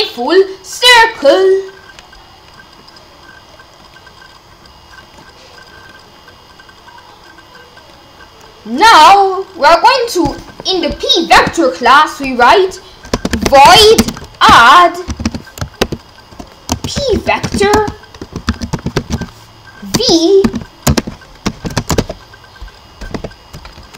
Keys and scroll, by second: 11.4 Return, 13.1-15.8 typing, 17.1-21.4 typing, 21.7 Return, 23.2 shift+].